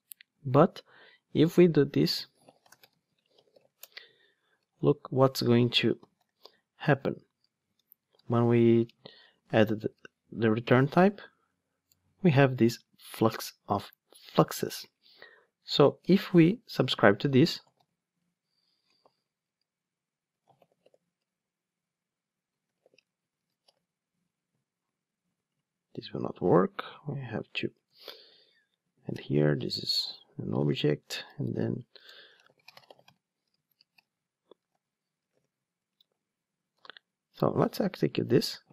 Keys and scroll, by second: 3.8 Return, 9.5 alt+Return, 11.9 Return, 18.3 Return, 21.2 Return, 24.2 Return, 31.3 alt+shift+Right, 33.7 alt+shift+Right, 35.9 Return, 38.3 ctrl+shift+d.